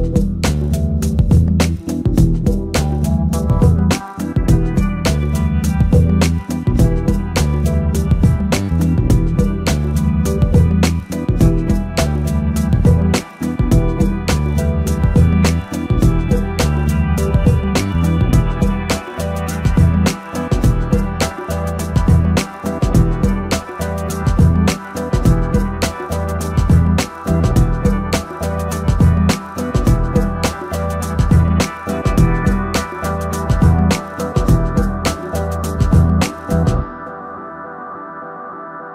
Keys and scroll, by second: 31.8 ctrl+j.